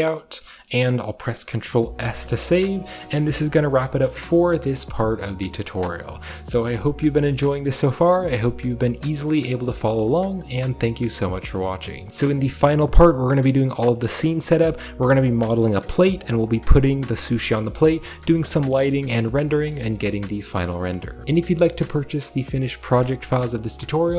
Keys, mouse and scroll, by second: 0.6 shift+scroll up 1, 0.6-1.9 shift+middle drag, 1.9 ctrl+s, 2.5-4.0 shift+middle drag, 3.6 KP_5, 4.2-6.7 scroll down 1, 4.5 z.